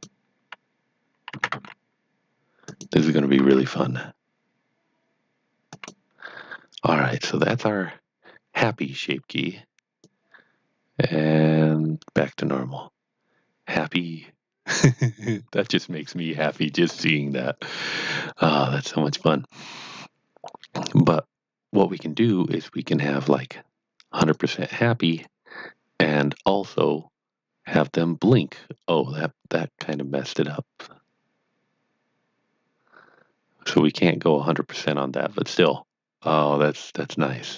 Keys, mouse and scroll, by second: 0.0-1.2 typing, 2.6 click, 3.4 g, 5.3-6.0 typing, 5.7 click, 7.5 Tab, 8.4 scroll down 1, 10.0 click, 22.8 click, 25.1 click.